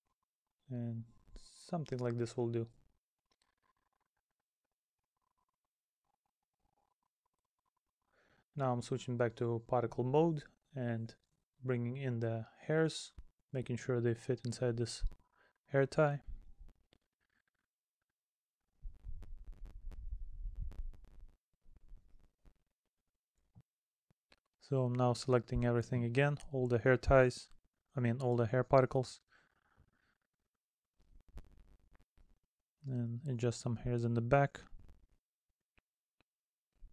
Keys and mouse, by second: 0.2 middle click, 4.7 middle click, 6.5 middle click, 7.2 middle click, 7.9 middle click, 10.8 middle click, 13.8 middle click, 16.4 middle click, 17.3 middle click, 20.3 middle click, 21.5 middle click, 23.6 middle click, 24.4 middle click, 26.7 middle click, 28.0 middle click, 29.3 middle click, 30.6 middle click, 31.4 middle click, 32.0 middle click, 33.0 middle click, 34.2 middle click, 35.7 middle click.